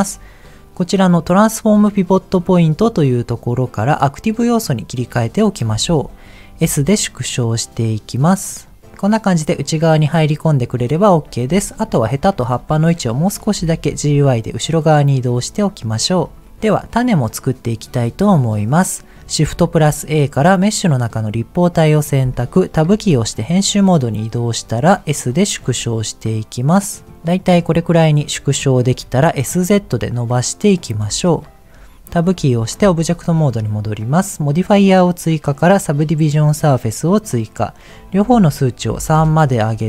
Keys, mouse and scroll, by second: 2.6-4.9 drag, 6.6 s, 8.9-10.9 middle drag, 11.5 click, 12.4 middle click, 13.8 g, 13.8 y, 15.1 click, 15.5 middle click, 16.2 click, 16.4 scroll down 3, 17.9 click, 19.5 shift+a, 22.8 Tab, 24.7-25.7 scroll down 4, 25.5 s, 27.3 click, 27.6-28.0 scroll up 2, 28.0 middle click, 28.3-28.7 scroll up 2, 28.7 shift+middle click, 29.2 s, 29.4 z, 30.8 click, 32.3 Tab, 36.5 click, 37.9-39.2 drag.